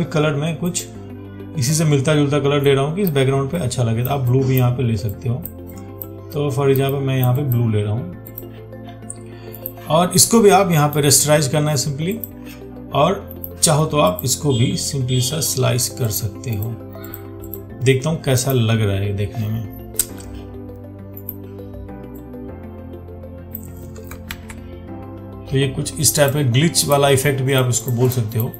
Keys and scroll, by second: 24.6 ctrl+d.